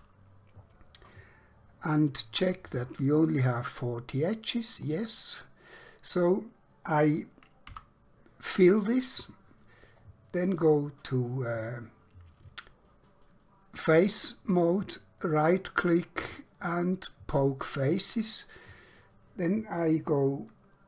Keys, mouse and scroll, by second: 7.7 f, 11.6 click, 15.3 right click, 17.4 click.